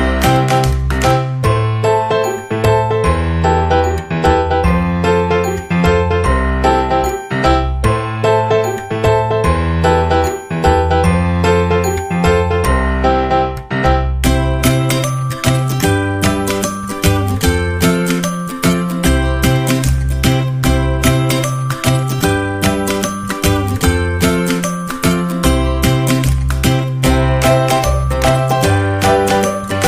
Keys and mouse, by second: 0.3 e, 2.0 middle click, 2.9 middle click, 3.9 middle click, 4.4 ctrl+r, 6.3 middle click, 7.1 middle click, 8.2 right click, 8.9 shift+middle click, 9.5 middle click, 10.8 e, 13.4 shift+right click, 14.4 f, 14.6 ctrl+z, 15.3 shift+right click, 15.8 f, 16.3 shift+middle click, 17.4 right click, 17.7 middle click, 18.3 e, 19.6 middle click, 20.1 e, 22.1 right click, 22.5-23.7 middle drag, 24.2 shift+right click, 24.5 f, 25.2 right click, 26.0 f, 26.3 middle click, 27.2 middle click, 28.7 middle click.